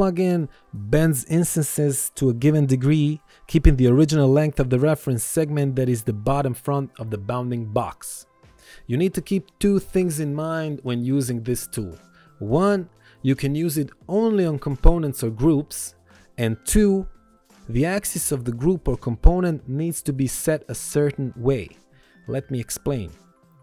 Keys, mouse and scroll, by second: 5.9 right click, 7.0 click, 10.6 ctrl+z, 11.3 click, 15.0 Return, 18.0 ctrl+1, 18.9 ctrl+1, 19.2 click, 21.8 ctrl+z.